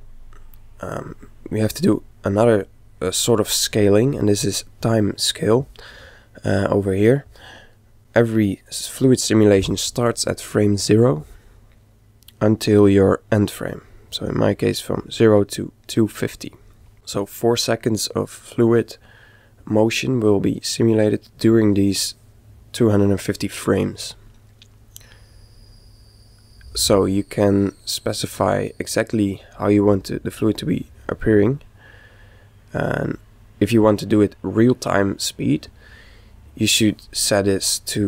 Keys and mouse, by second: 0.1 click, 27.6-29.5 middle drag, 31.8-33.6 middle drag, 34.2-35.9 middle drag, 37.9 click.